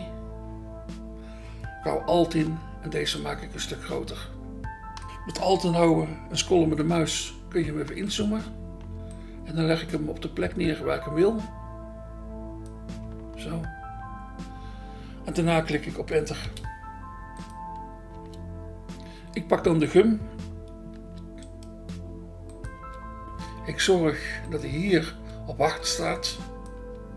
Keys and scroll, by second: 16.6 Return, 22.8 BackSpace, 25.0 BackSpace.